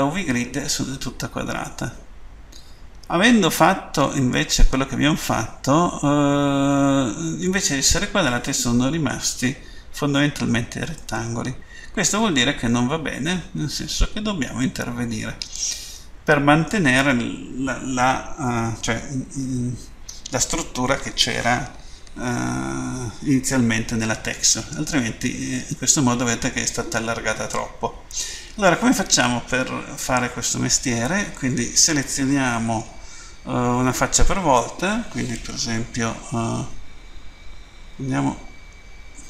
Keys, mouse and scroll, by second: 1.6 middle click, 11.0 middle click, 24.4 middle click, 28.2 middle click, 38.0 End.